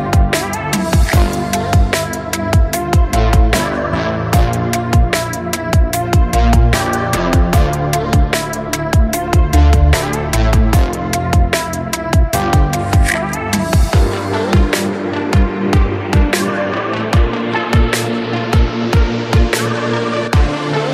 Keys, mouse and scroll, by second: 1.7 click, 3.7-5.0 drag, 5.0-5.5 scroll up 1, 5.7 click, 6.7-7.6 drag, 7.6 alt+z, 7.9 drag, 8.6 click, 9.4-10.2 drag, 10.2-10.5 scroll up 1, 10.5-11.0 shift+middle drag, 11.0 g, 11.4 z, 12.5 drag, 13.2 g, 15.3-16.7 shift+middle drag, 16.7-17.0 scroll down 1, 17.0-18.1 shift+middle drag, 18.1-19.1 drag, 19.1 alt+z, 19.3 drag, 19.7 drag.